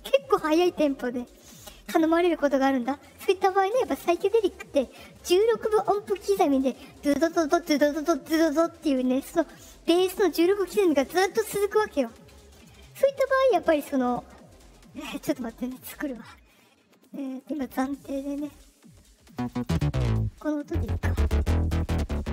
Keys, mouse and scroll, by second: 14.0 middle click, 14.6 middle click, 16.9 click, 18.3 click, 19.2 click, 19.4 click, 19.5 click, 19.6 click, 19.8 click, 20.5 click, 20.7 click, 20.8 click, 21.0 click, 21.1 click, 21.3 click, 21.7 click, 21.9 click, 22.1 click, 22.2 click.